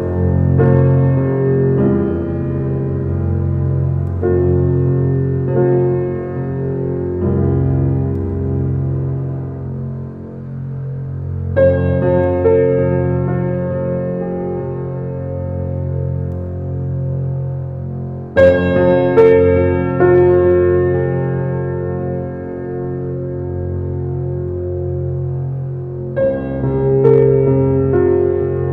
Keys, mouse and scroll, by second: 0.5 r, 2.7 s, 3.5 alt+middle click, 4.0-4.6 scroll up 4, 4.3 shift+middle click, 4.9 g, 7.0 shift+middle drag, 7.3 scroll up 1, 7.5 shift+middle click, 8.2 s, 10.6 g, 11.8 alt+middle click, 12.4 scroll up 1, 12.6 g, 14.5-15.6 middle drag, 15.9 right click, 16.7 click, 16.9-17.8 scroll down 5, 17.8 click, 18.4-19.6 middle drag, 19.6-20.2 scroll up 1, 20.2 g, 22.1 Tab, 22.4 click, 24.3 click, 24.9 alt+click, 26.6 click, 27.3 alt+click, 28.1 ctrl+b.